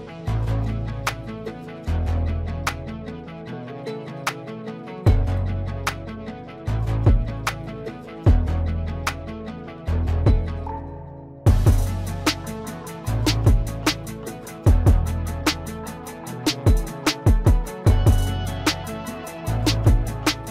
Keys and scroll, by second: 2.0 F4.